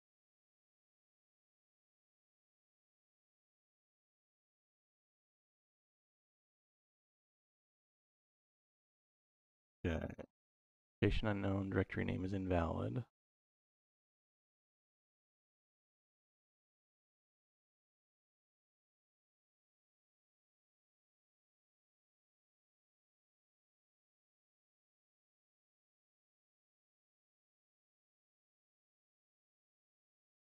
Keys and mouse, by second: 14.2 click, 20.5 click, 22.5 middle click, 23.2-24.4 drag, 24.9-25.9 drag, 26.2 middle click, 27.8 middle click, 28.6 middle click, 30.1 click.